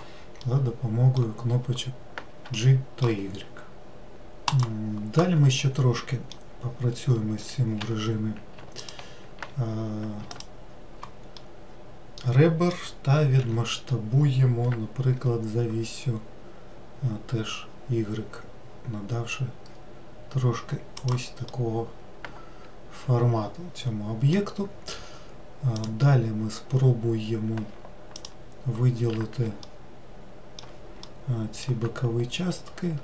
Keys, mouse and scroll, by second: 0.4-4.5 middle drag, 5.5-7.7 middle drag, 7.7 2, 8.7 ctrl+click, 10.2 alt+click, 11.3-13.3 middle drag, 13.3 s, 21.4-24.4 middle drag, 25.6 click, 28.0 alt+click, 29.5 alt+middle click, 30.9-33.0 middle drag.